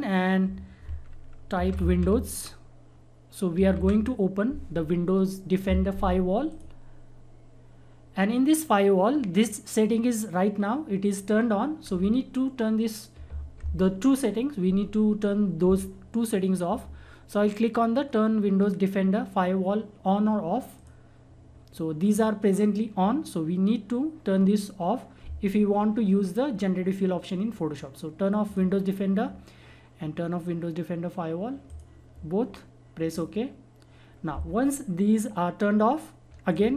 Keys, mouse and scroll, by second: 1.3-4.0 typing, 6.5 click, 20.7 click, 20.8 click, 28.4 click, 31.6 click, 36.4 click, 36.5 click.